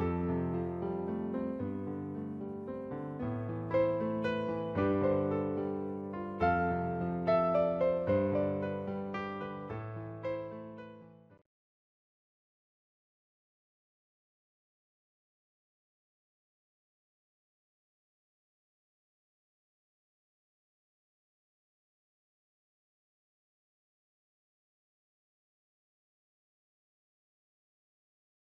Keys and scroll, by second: 1.9 space.